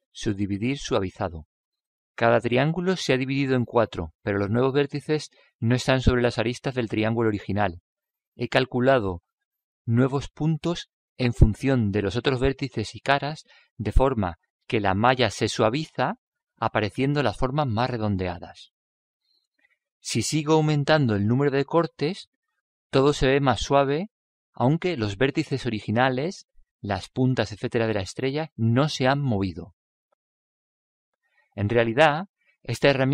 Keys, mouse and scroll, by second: 4.0-5.7 middle drag, 6.9-8.5 middle drag, 20.7 click, 24.1-25.9 middle drag, 24.7 click, 26.5-28.3 drag, 27.3-29.2 middle drag.